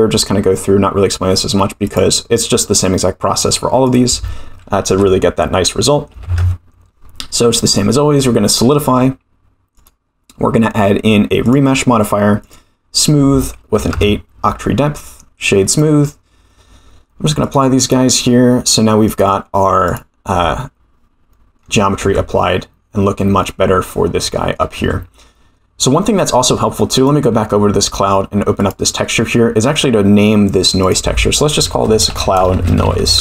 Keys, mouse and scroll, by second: 3.8-7.0 drag, 7.6-8.1 middle drag, 8.5 scroll up 3, 9.7-11.5 drag, 12.4 click, 12.9-14.4 drag, 14.9 scroll down 5, 16.1 click, 17.4-18.3 drag, 19.0-20.4 drag, 21.3-21.6 middle drag, 22.7 Tab, 23.4-24.5 middle drag, 25.0 Tab, 25.9-26.4 scroll down 1, 26.9 click, 28.5 click, 30.8-33.2 drag.